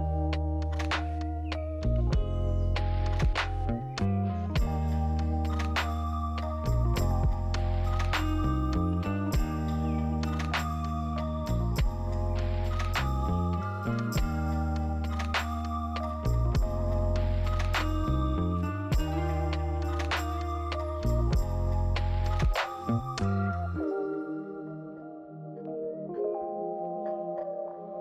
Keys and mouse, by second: 0.2 h, 1.0 ctrl+z, 3.0 r, 5.3 g, 8.5 z, 10.2 g, 11.8 click, 12.1 z, 13.5 click, 14.3 click, 14.7 ctrl+s, 16.2 click, 18.5 click, 19.1 click.